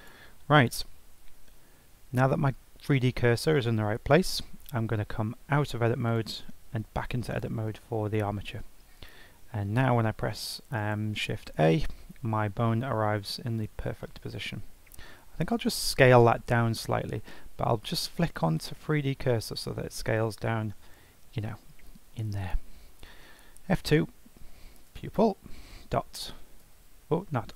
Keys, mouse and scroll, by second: 5.5 Tab, 6.2 click, 6.7 Tab, 7.2 click, 11.1 shift+a, 12.3-12.8 scroll down 3, 12.8 scroll up 2, 13.5 click, 14.0-15.3 shift+middle drag, 15.3 s, 17.9-19.5 drag, 19.5 s, 23.4 F2.